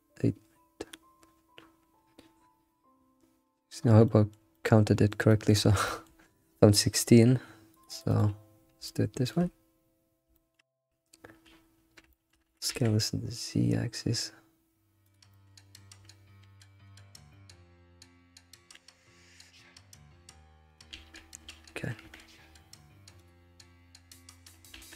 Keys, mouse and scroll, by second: 4.0-7.7 shift+middle drag, 7.7 click, 8.6 scroll down 3, 8.8 shift+middle click, 9.7-10.3 scroll down 3, 10.3-11.5 shift+middle drag, 11.5-12.1 scroll up 3, 12.1 shift+middle click, 12.4 s, 15.3 shift+middle click, 15.5-16.0 scroll up 8, 16.4 ctrl+z, 17.3-18.6 shift+middle drag, 18.6 s, 20.9 alt+shift+z, 21.5 alt+shift+z, 22.0 Tab, 22.3 scroll down 4, 23.5 click, 24.4-24.8 scroll down 3, 24.8 alt+shift+z.